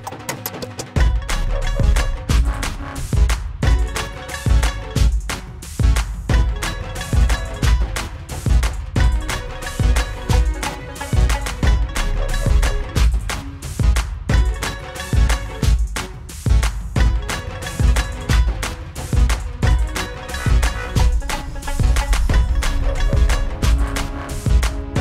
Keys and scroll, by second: 21.0 ctrl+-.